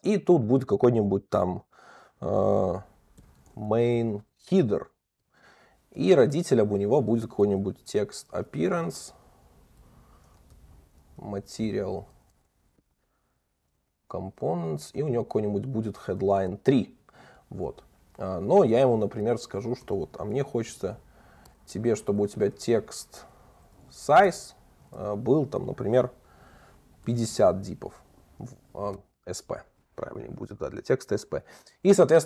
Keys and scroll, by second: 6.1 Return, 16.5 Return, 17.5 Return, 21.5 Return.